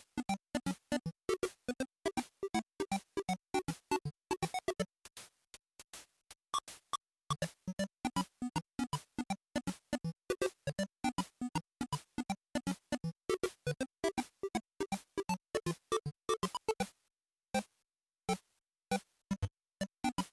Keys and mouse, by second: 6.4 click, 7.7 click, 8.9 click, 9.2 click, 11.1 z.